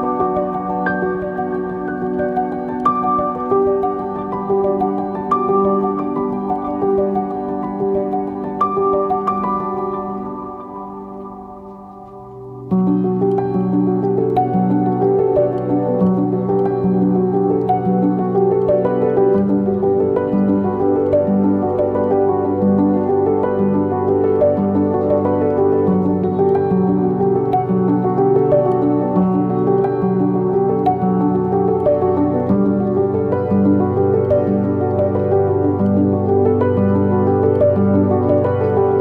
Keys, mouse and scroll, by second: 2.1 KP_1, 6.0 click, 10.9 z, 12.9 click, 13.6 KP_0, 14.8 Delete, 15.7 KP_0, 16.9-22.7 shift+middle drag, 17.4-18.2 scroll up 2, 18.2-18.8 scroll up 1, 22.1-22.7 scroll up 1, 22.7 click, 26.4 z, 27.1 click, 30.0 Tab, 33.0 click, 33.8-34.8 drag, 35.1 click, 36.8 click, 37.6 scroll down 1, 37.8 KP_0, 38.6 r.